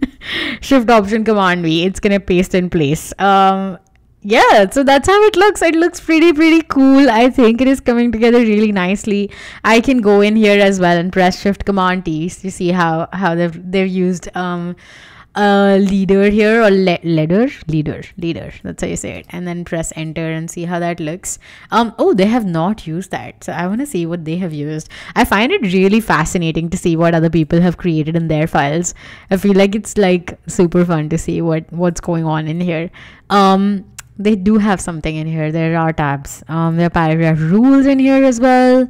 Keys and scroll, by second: 0.7 alt+shift+super+v, 3.6 w, 11.6 shift+super+t, 19.1 space, 19.9 Tab, 20.9 Escape.